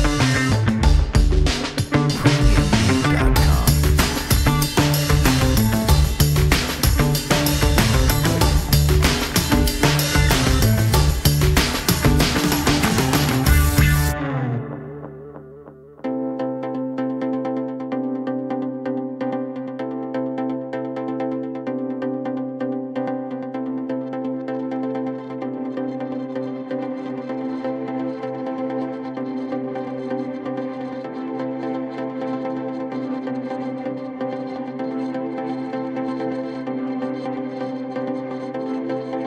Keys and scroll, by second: 3.7 w, 4.4 ctrl+t, 9.2 alt+x, 15.0 alt+x, 16.1 alt+x, 25.1 F4, 25.4 2, 25.6 F4, 28.1 F4, 29.2 F4, 30.3 F4, 30.8 2, 33.7 w, 34.3 F4, 35.2 2, 38.4 F4.